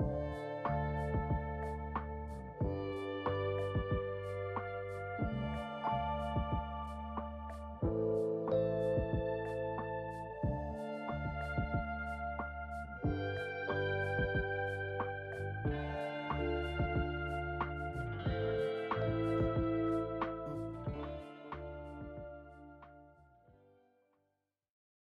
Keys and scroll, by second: 4.4 F4.